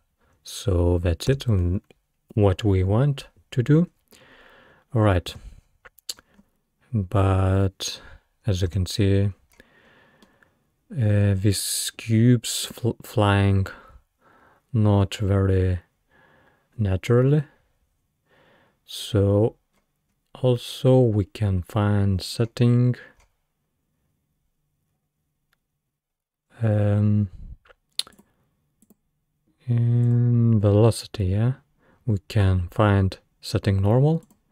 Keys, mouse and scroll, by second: 1.3 space, 4.7-5.0 scroll down 2, 5.0-5.3 scroll up 1, 5.3 space, 5.9 scroll down 4, 6.2-6.7 scroll up 7, 8.7 space, 9.6-10.0 scroll up 4, 10.3-12.7 middle drag, 12.7 scroll up 1, 18.4 scroll down 2, 19.1-19.4 scroll up 2, 19.8-20.7 scroll up 8, 21.2-22.2 scroll up 2, 22.2-23.2 scroll up 6, 23.2-24.9 scroll up 4, 28.1-31.9 drag, 31.9 scroll down 2, 34.3-34.5 drag.